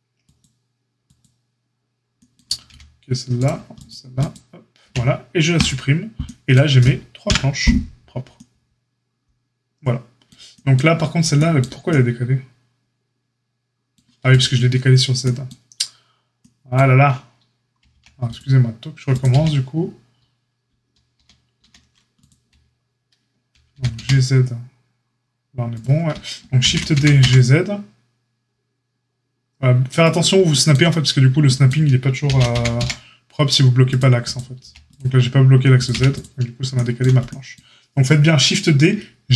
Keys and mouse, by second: 1.1 click, 1.1-3.7 middle drag, 2.6 g, 3.7 click, 3.8 middle click, 4.2 click, 4.3-14.2 middle drag, 4.8 x, 7.2 KP_Divide, 14.2 click, 14.3-19.0 middle drag, 17.8 x, 19.0 click, 19.2-22.1 middle drag, 19.3 x, 21.1 ctrl+z, 21.6 ctrl+z, 22.1 click, 22.2-34.3 middle drag, 23.7 g, 26.6 shift+d, 32.2 shift+d, 34.3 click, 34.6-39.3 middle drag, 34.6 x, 35.9 x.